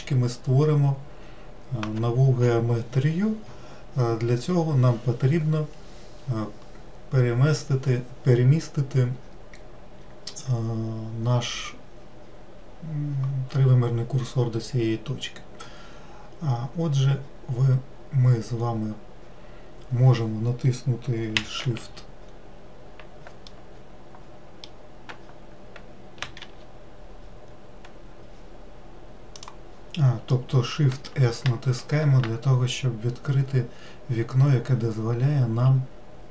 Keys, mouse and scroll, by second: 17.9-19.0 scroll down 1, 19.0-22.0 scroll up 3, 22.0 shift+f, 23.9-26.8 middle drag, 26.8 shift+f, 30.8-32.2 middle drag, 32.2 shift+s.